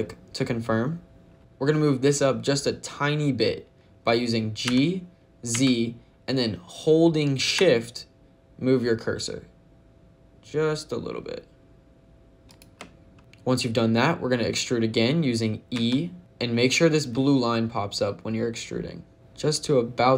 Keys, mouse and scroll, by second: 4.5 g, 5.4 z, 12.3 shift+click, 15.6 e.